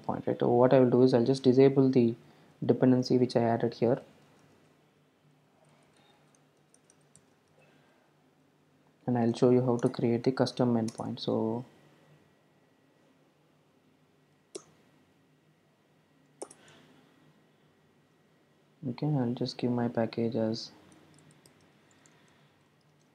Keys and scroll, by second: 2.3 super+z, 3.3 super+z, 3.9 super+z, 4.4 super+z, 5.6 super+z, 6.2 super+z, 6.9 super+z, 7.6 super+z, 8.8 super+z, 9.1 super+e, 10.9 alt+Return, 23.0 Tab.